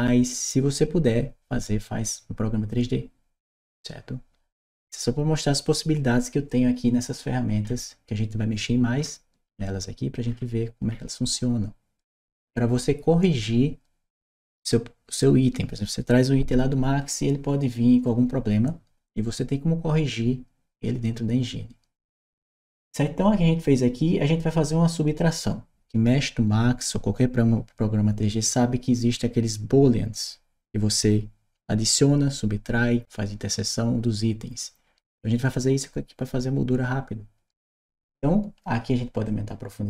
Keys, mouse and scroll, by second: 7.5 scroll down 1, 8.8-10.1 scroll down 2, 10.1-10.7 scroll down 1, 10.7-16.1 scroll down 1, 39.1-39.8 drag.